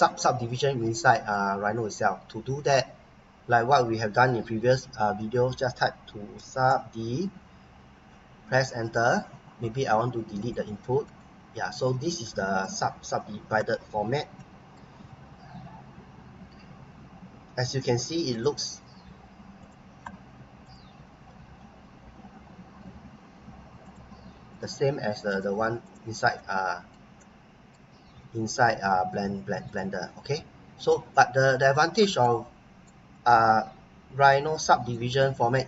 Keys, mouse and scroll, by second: 1.7 scroll up 1, 2.1 scroll down 1, 4.4-7.5 typing, 8.5 Return, 10.4 click, 11.1 right click, 13.1 scroll up 1, 14.4 right click, 18.3 click, 23.8 click, 26.3 right click, 29.6 click, 31.1 middle click, 32.2 right click, 33.1 scroll down 1, 34.5 right click, 35.1 right click.